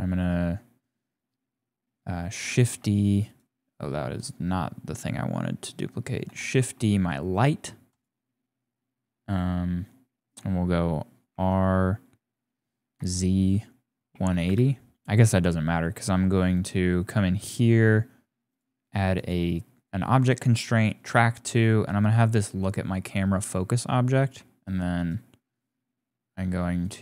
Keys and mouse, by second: 2.5 shift+d, 6.3 shift+d, 11.3 r, 16.5 click, 17.4 click, 18.5 click, 19.2-20.4 drag, 21.9 click, 23.3 click, 24.3 g.